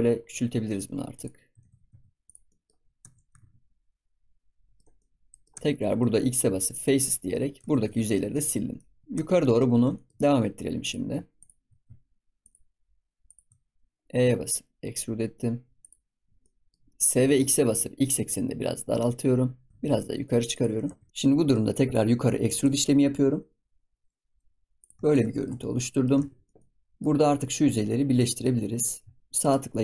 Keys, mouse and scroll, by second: 1.6 ctrl+s, 2.4-2.7 middle drag, 2.7 scroll up 4, 3.0 Tab, 3.2 g, 4.7-5.5 middle drag, 5.5 Tab, 6.1 x, 7.5 Tab, 7.9 ctrl+s, 8.3-8.9 middle drag, 8.9 scroll down 1, 9.0 shift+middle click, 9.1 Tab, 9.4 middle click, 9.7 scroll up 2, 9.9 shift+middle click, 10.8 click, 11.3 shift+click, 12.3 shift+click, 13.2 shift+click, 13.6-14.0 scroll down 4, 14.0 e, 16.1 scroll down 2, 16.4 middle click, 16.8 scroll up 3, 16.9 middle click, 17.1 s, 21.0-22.5 middle drag, 22.5 e, 25.3 shift+middle click, 26.1 ctrl+s, 26.4 middle click, 26.5-26.8 scroll up 2, 26.8-28.1 middle drag, 28.1 click, 28.4 middle click, 29.3-29.8 right drag.